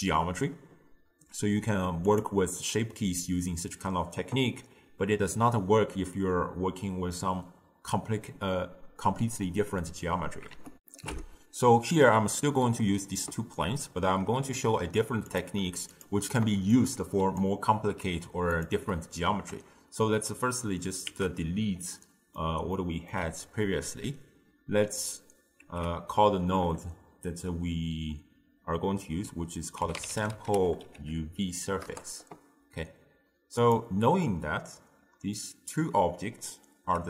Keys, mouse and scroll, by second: 2.1 click, 10.9 ctrl+alt+shift+q, 15.4 click, 16.0 shift+click, 16.8 click, 18.6 shift+click, 21.1 ctrl+x, 21.9-25.7 middle drag, 25.7 ctrl+a, 34.3-37.0 middle drag.